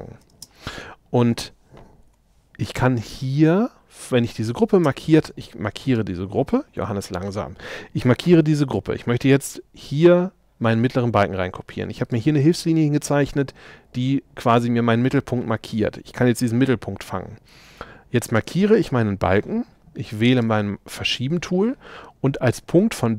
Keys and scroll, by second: 0.3 space, 2.1 m, 4.8 space.